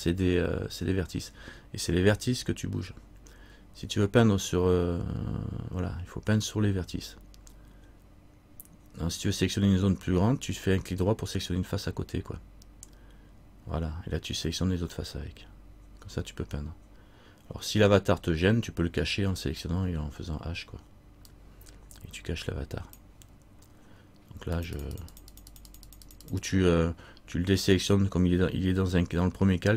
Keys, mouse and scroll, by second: 24.7 click.